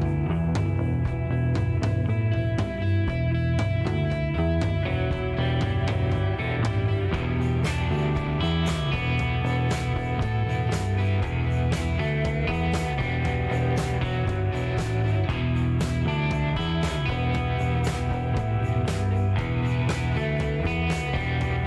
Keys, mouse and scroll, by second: 1.6 ctrl+click, 4.5 ctrl+click, 5.3 ctrl+shift+right click, 6.9 shift+middle click, 7.5 shift+right click, 10.5 click, 11.6 middle click, 12.2 scroll up 2, 13.1 middle click, 14.2 middle click, 15.0 middle click, 15.5 shift+right click, 17.3 shift+right click, 20.2 shift+middle click, 20.7 shift+right click.